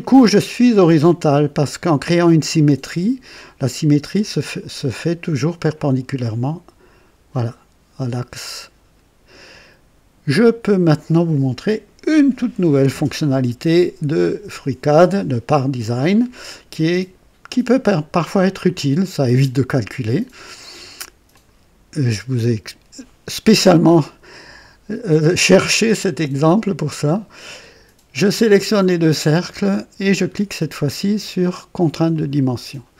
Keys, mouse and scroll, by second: 11.0-12.2 right drag, 11.0 click, 21.2 click, 26.6 click, 32.1 click.